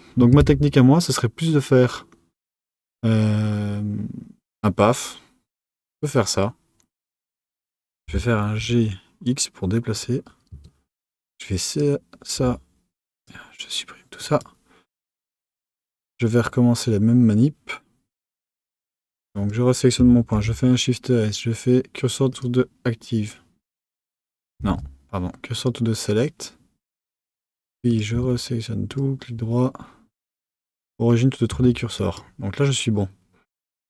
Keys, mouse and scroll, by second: 0.3 shift+a, 10.5 Tab, 11.1 click, 12.3 x, 14.2 click, 15.6-18.6 right drag, 19.3 click, 20.3 shift+s, 24.6 shift+s, 27.2 right click, 27.8 click, 28.1 Tab, 28.8-31.5 right drag, 31.5 Tab, 31.9 click.